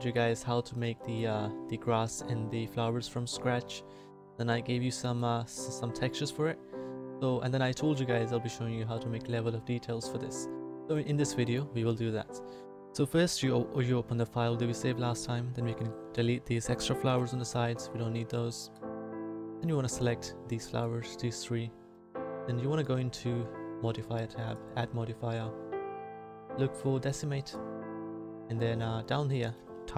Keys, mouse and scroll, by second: 3.5-4.6 middle drag, 7.3-11.9 middle drag, 16.0 right click, 17.0 Delete.